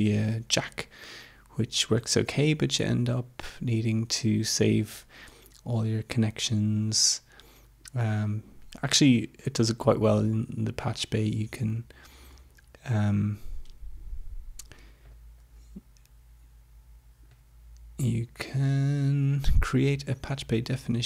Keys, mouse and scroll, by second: 6.8 click, 9.6 click, 15.0 click, 17.4 click, 18.4 click.